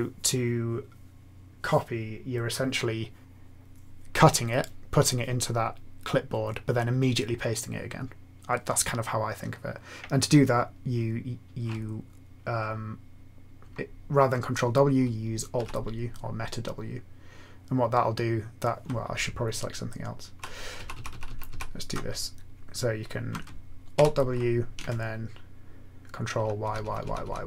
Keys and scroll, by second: 15.6 alt+w, 19.2 Right, 19.7 Right, 19.7-20.3 Right, 20.7 Right, 21.2 shift+Right, 21.4 shift+Right, 23.9 alt+w, 26.3 ctrl+y, 26.6 ctrl+y, 26.8 ctrl+y, 27.0 ctrl+y, 27.2 ctrl+y.